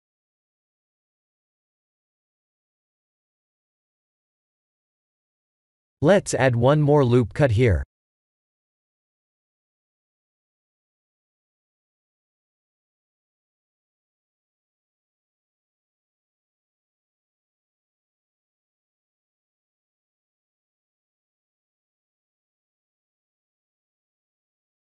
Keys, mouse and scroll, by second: 0.4 alt+click, 0.9 s, 2.0 Tab, 2.5-3.4 scroll down 8, 3.9 shift+middle click, 4.7-6.1 scroll up 6, 6.1 scroll up 1, 6.8 click, 7.3 Tab, 9.5 shift+middle click, 10.1 shift+middle click, 11.8 ctrl+r, 14.2 ctrl+b, 17.9-18.2 scroll up 3, 18.3 shift+middle click, 19.0-19.5 scroll up 1, 19.5 scroll up 1, 19.6 2, 20.1 3, 20.7 alt+click, 21.8 s, 23.7 Tab, 24.6-24.9 scroll down 6.